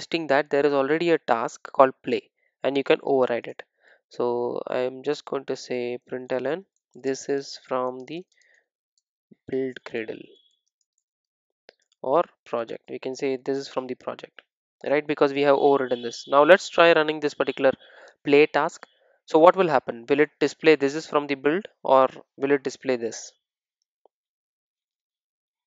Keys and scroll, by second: 2.2 Return.